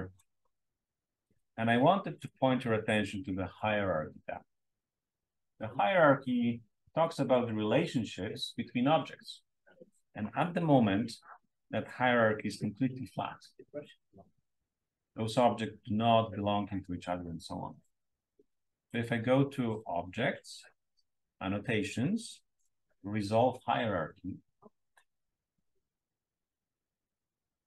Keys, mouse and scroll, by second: 2.2-4.9 drag, 10.2-11.2 drag, 11.2-12.8 scroll up 1, 12.8-15.2 scroll up 1, 15.2-15.9 scroll up 1, 15.9-19.7 scroll up 1, 19.7-20.3 scroll up 1, 20.3-25.4 scroll up 1, 25.4-27.6 scroll up 1.